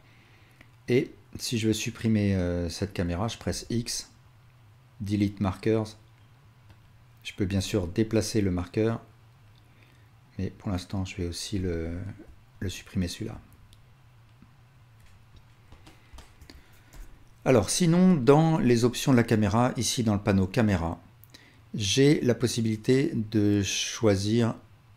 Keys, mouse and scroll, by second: 3.5 x, 7.6 g, 12.2-13.1 ctrl+drag, 13.3 x, 15.9-19.9 alt+shift+drag, 16.9 KP_0.